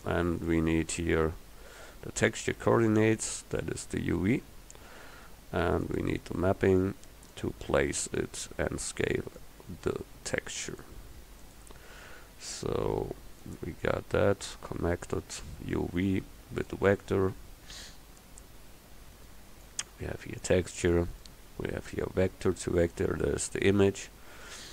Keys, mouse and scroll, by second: 0.5-2.1 drag, 5.9-7.9 drag, 9.5-10.9 drag, 12.8-14.2 drag, 16.4 scroll up 1, 16.8 middle click, 24.6 click.